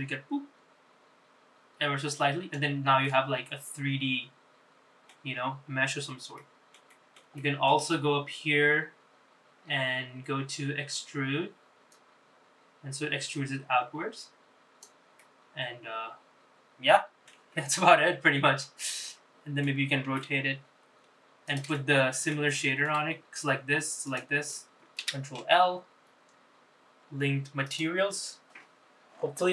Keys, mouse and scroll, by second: 2.8-4.8 middle drag, 5.0-5.4 scroll up 3, 5.6-6.1 scroll down 2, 6.1 middle click, 6.6 shift+middle click, 7.1 middle click, 9.4-10.1 scroll up 2, 10.7-11.6 scroll down 1, 11.6 click, 14.9-17.1 middle drag, 17.1 Tab, 17.5-18.0 scroll down 4, 18.3-19.4 middle drag, 19.8 r, 21.5 middle click, 22.2 shift+middle click, 23.8 shift+click, 24.7 ctrl+l.